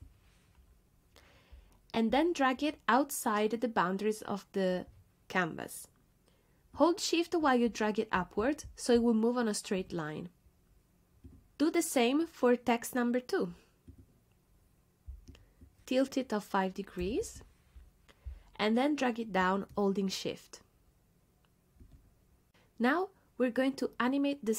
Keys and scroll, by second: 17.0 5, 17.2 Return.